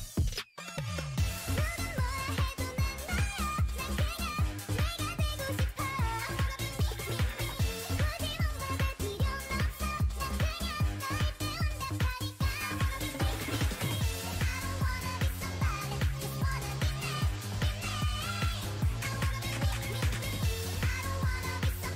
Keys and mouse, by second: 3.4 a, 4.3-7.4 drag, 4.5 x, 6.4-7.4 middle drag, 7.4 a, 8.9-10.6 right drag, 9.2 x, 9.6 a, 9.9 click, 10.7-12.4 drag, 13.3 g, 14.5 g, 17.1 g, 18.7 Tab, 19.5 Tab, 20.1 Tab.